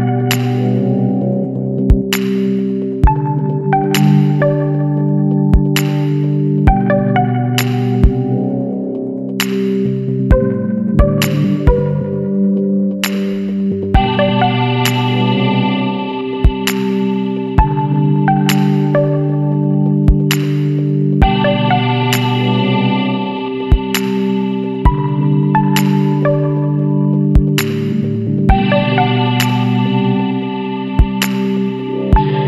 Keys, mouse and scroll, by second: 0.0 KP_0, 0.5 KP_Enter, 1.3-1.7 scroll down 2, 2.2 scroll down 2, 3.4-4.6 drag, 4.8-5.3 scroll up 2, 5.9 Down, 6.3 Up, 8.0 scroll up 2, 8.5 Down, 8.8 Up, 9.4 scroll up 1, 14.0 click, 16.8 click, 19.2 click, 21.5 click, 24.3 click, 26.1 click, 27.6 KP_7, 28.3 KP_Enter.